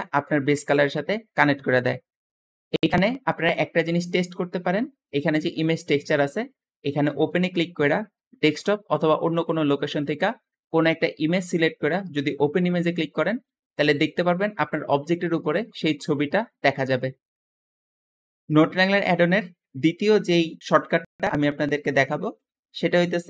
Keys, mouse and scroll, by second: 2.7 Escape, 2.8 Escape, 3.4 middle click, 3.4-3.9 scroll up 2, 3.9 scroll down 2, 4.0 middle click, 4.0 scroll up 2, 4.1 scroll down 2, 4.1 scroll up 2, 4.4 middle click, 5.3 g, 5.4 g, 12.1 click, 18.7 middle click, 18.7-19.2 scroll down 2, 21.2-21.8 scroll down 2, 22.0 middle click, 22.4-22.9 scroll up 2, 22.9 middle click.